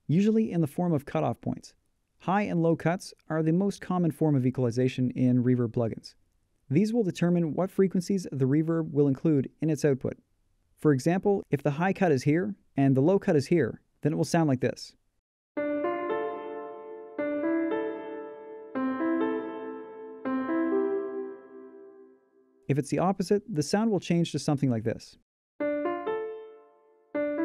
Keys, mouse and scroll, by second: 23.8 click.